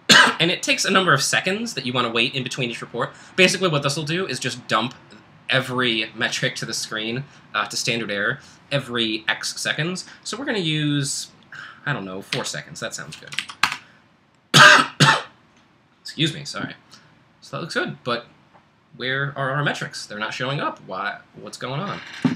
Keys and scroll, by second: 12.3 4, 13.6 super+Right, 14.3 Return.